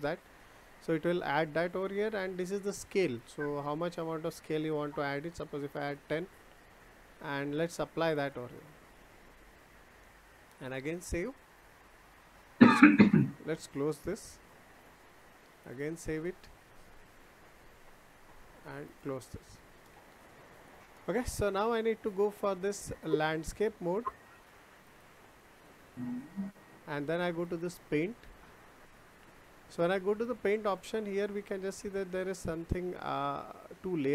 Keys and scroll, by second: 5.7 Return.